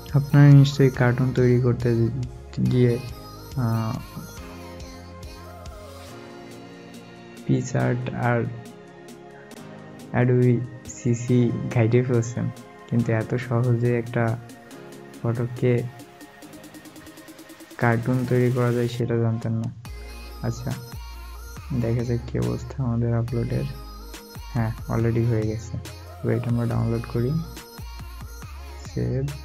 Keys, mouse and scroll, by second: 13.5 scroll down 1, 15.0 alt+scroll up 1, 15.8 alt+scroll down 1, 23.5 scroll down 1.